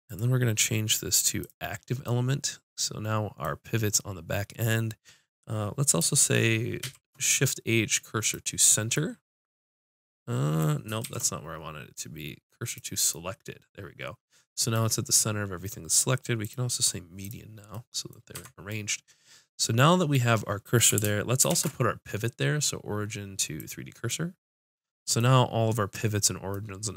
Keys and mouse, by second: 2.0 click, 2.0 right click, 2.2 middle click, 6.8 shift+s, 7.1-9.4 drag, 8.3-9.4 right drag, 9.4 middle click, 11.0 shift+s, 16.4-18.3 drag, 17.8 middle click, 18.4 Tab, 24.1 click.